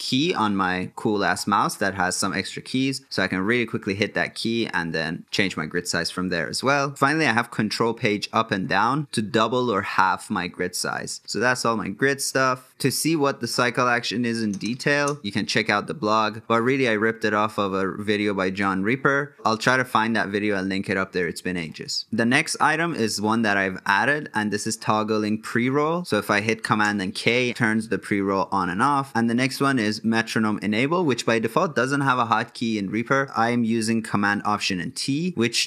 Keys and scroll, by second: 6.9 ctrl+Page_Up, 26.0 super+k, 33.2 alt+super+t.